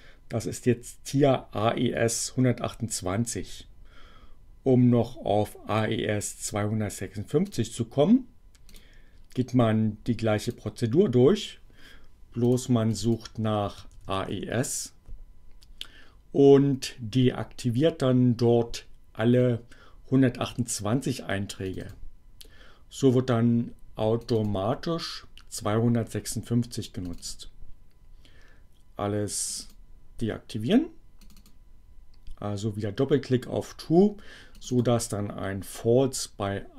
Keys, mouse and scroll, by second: 7.5 click, 8.7 click, 10.5 click, 12.4 click, 12.9 click, 13.5-14.8 typing, 21.7 click, 24.2 click, 27.1 click, 29.5 click, 31.2 click, 34.5 click.